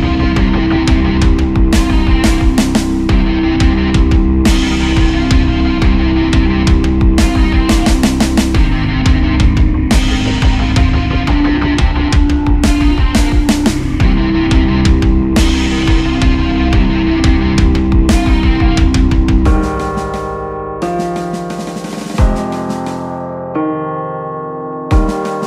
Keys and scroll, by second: 0.2 ctrl+z, 1.7 ctrl+z, 4.1 Tab, 4.5 ctrl+a, 4.8 Down, 6.0 End, 7.2 Home, 7.7 ctrl+s, 8.1 space, 8.2 Right, 8.3 ctrl+Return, 8.7 ctrl+s, 10.6 Left, 14.3 Down, 14.4 Up, 15.3 Down, 18.1 Right, 18.7 Tab, 20.8 ctrl+s, 21.1 ctrl+Up, 22.0 Tab, 22.1 ctrl+Up, 22.3 ctrl+s.